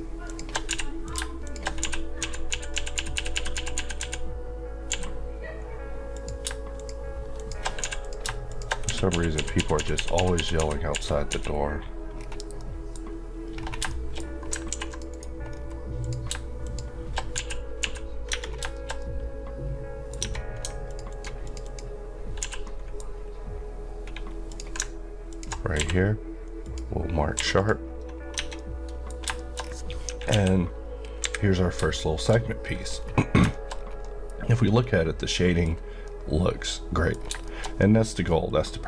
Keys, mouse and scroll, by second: 0.3 shift+Left, 0.7 f, 1.0 click, 2.2-4.9 typing, 6.2 click, 7.8 f, 8.0 click, 8.3 shift+click, 9.1-11.3 typing, 12.2 scroll down 1, 12.6 middle click, 13.1 scroll up 1, 13.8 shift+scroll down 1, 13.9 shift+middle click, 14.4-14.7 scroll down 2, 14.7 ctrl+r, 14.9 ctrl+click, 15.1 right click, 15.5-16.0 scroll up 1, 16.0 click, 17.8 typing, 18.3 Tab, 18.4 scroll down 1, 18.7 shift+middle click, 20.2 Tab, 20.9 click, 21.1 alt+Left, 22.4 f, 22.7 middle click, 23.2 scroll up 1, 25.0 ctrl+click, 25.8 q, 26.6 click, 27.4 q, 27.6 click, 28.2 scroll down 1, 28.6 middle click, 29.1-30.3 scroll down 3, 30.3 KP_1, 31.3 KP_3, 32.0 shift+middle click, 32.9-33.4 scroll up 1, 33.5 shift+middle click, 33.7 scroll up 1, 34.0 middle click, 34.8 KP_Decimal, 35.6 scroll down 1, 36.1 middle click, 37.1 scroll down 1, 37.5 shift+middle click.